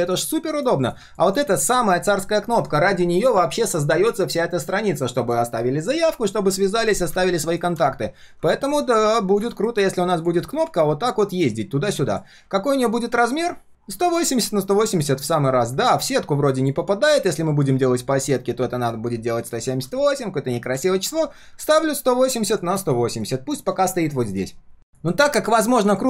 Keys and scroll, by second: 20.7 ctrl+z.